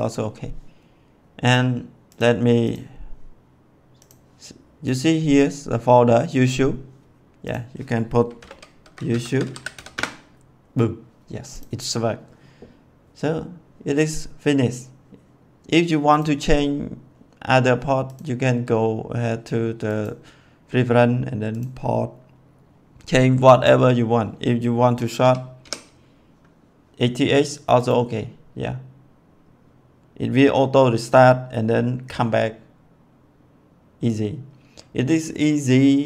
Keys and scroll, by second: 8.3-9.6 typing, 9.8 Return, 25.1 8.